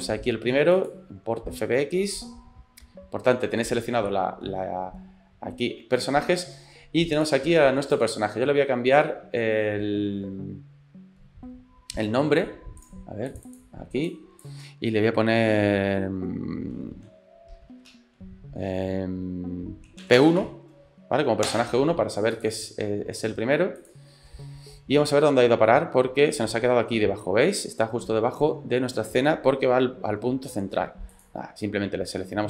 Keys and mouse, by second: 7.2 click, 7.9-12.7 drag, 12.9-21.9 drag, 17.7 BackSpace, 17.8 BackSpace, 23.8 click, 25.7 middle click, 27.2 middle click, 27.9 click, 28.3 middle click, 31.2 click.